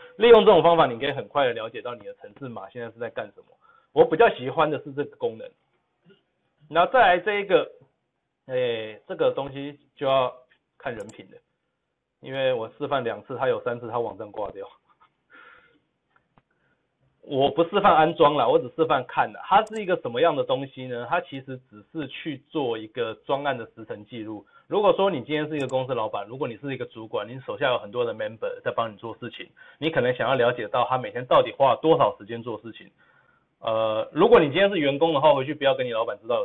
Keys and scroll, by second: 5.6 ctrl+z.